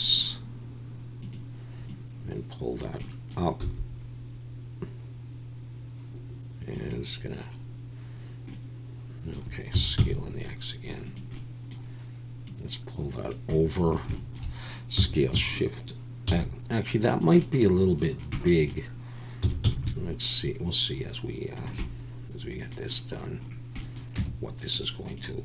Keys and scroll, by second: 3.6 s, 9.7 s, 9.9 x, 15.0 s, 16.3 shift+x, 19.4 s, 19.6 x, 24.2 Tab.